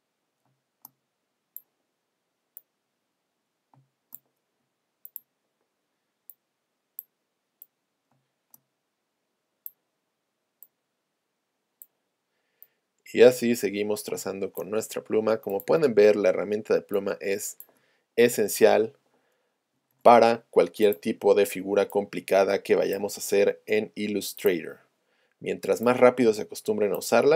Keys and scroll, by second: 0.5 space, 3.7 space, 8.2 space, 14.2 space.